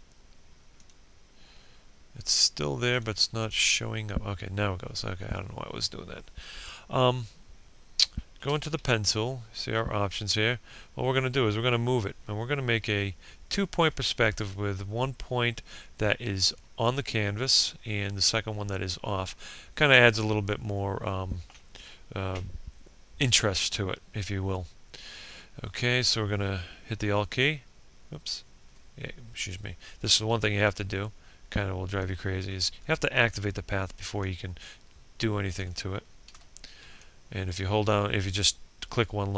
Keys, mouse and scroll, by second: 6.6 b, 10.8 ctrl+scroll down 1, 25.1 alt+click, 28.0 b, 29.6 click, 31.9 alt+click, 34.0 ctrl+z, 34.7-39.3 alt+drag.